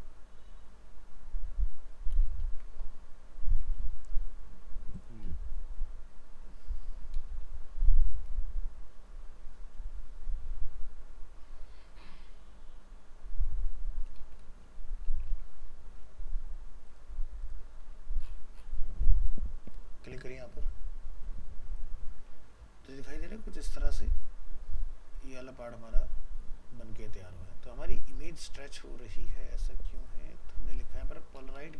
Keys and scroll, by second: 2.1 ctrl+v, 15.3 ctrl+s.